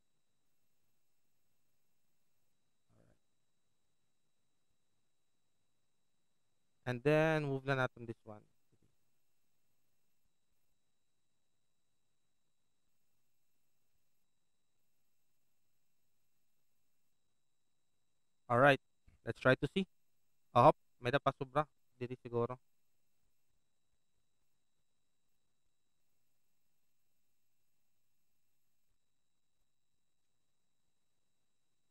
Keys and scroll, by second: 4.9 alt+space, 6.0 alt+space, 10.1 ctrl+alt+t, 16.2 ctrl+alt+shift+Return, 16.7 ctrl+alt+v, 20.4 alt+s.